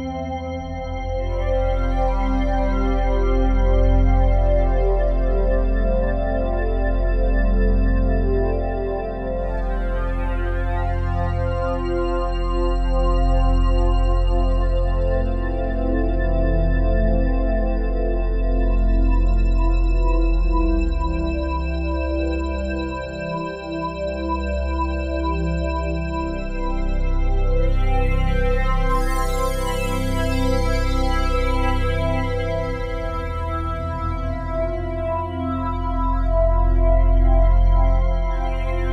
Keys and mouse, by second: 1.7 click, 3.5 ctrl+s, 4.9 i, 7.1 click, 10.4 click, 11.7-14.4 drag, 16.7-18.5 drag, 21.4 i, 22.9 Escape, 23.9-26.2 drag, 26.2 i, 27.4-30.5 drag, 31.2 click, 31.6 click, 34.6 click, 35.4-37.0 drag, 37.5-38.3 drag.